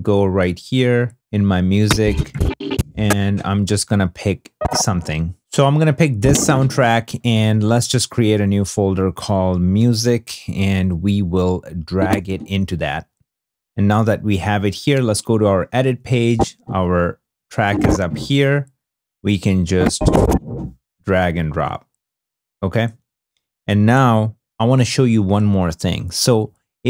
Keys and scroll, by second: 5.3 alt+x, 9.7 m, 10.0 Return.